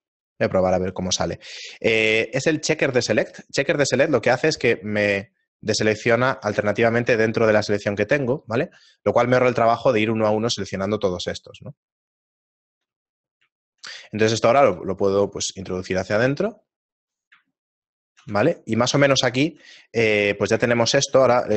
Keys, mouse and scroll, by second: 12.0 shift+middle click, 13.4 middle click, 14.6 shift+middle click, 14.6 e, 17.9 shift+middle click.